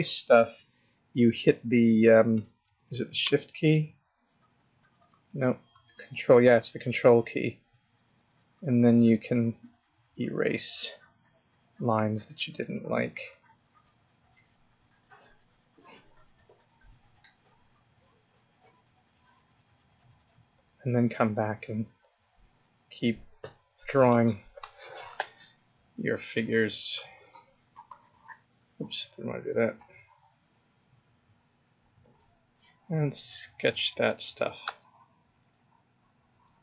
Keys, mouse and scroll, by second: 1.3 click, 2.6 shift+click, 2.8 ctrl+click, 3.3 shift+click, 5.3 click, 5.8 ctrl+click, 21.6 click, 21.8 click, 22.4 click, 22.5 click, 22.8 click, 26.5 click, 27.0 click, 27.3 click, 27.7 click, 27.9 click, 28.8 click, 29.1 click, 29.4 click, 29.8 click, 30.9 click, 32.7 click, 34.4 click.